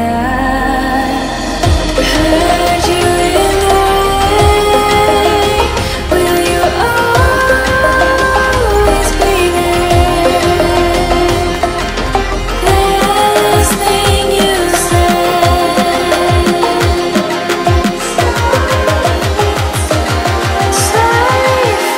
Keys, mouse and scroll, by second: 0.3-3.3 drag, 3.3 Tab, 4.2-7.3 middle drag, 10.7 KP_7, 12.6-14.1 scroll down 3, 14.1 click, 15.7-17.5 scroll down 2, 17.5 click, 17.5 scroll down 1, 18.2 click, 19.6-20.1 scroll up 5, 20.2 click, 21.5-21.9 scroll down 1.